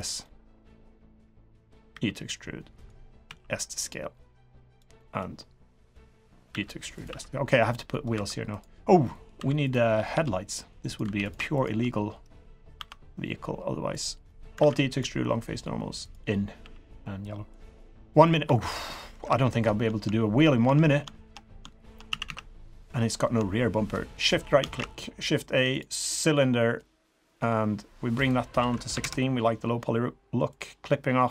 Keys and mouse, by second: 0.2 middle click, 0.9 middle click, 1.9 e, 3.2 s, 5.0 middle click, 5.8 click, 6.1 middle click, 6.5 e, 7.0 s, 7.9 middle click, 8.1 3, 9.0 middle click, 9.4 2, 9.6 click, 9.9 g, 11.0 3, 11.2 click, 11.5 shift+click, 12.7 i, 14.2 middle click, 14.6 alt+e, 16.6 g, 18.2 click, 18.4 3, 18.7 middle click, 19.2 KP_3, 20.7 shift+click, 22.1 a, 22.4 a, 24.2 shift+click, 24.6 a, 26.6 middle drag, 28.2-29.4 drag, 30.5 click.